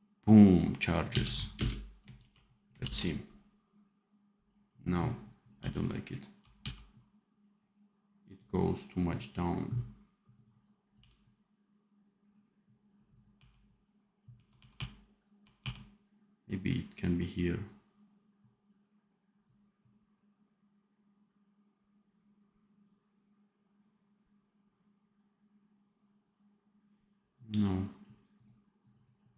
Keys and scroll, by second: 1.0 d, 1.5 space, 2.1 ctrl+b, 5.5 d, 10.9 f, 13.3 r, 14.5 r, 15.1 r.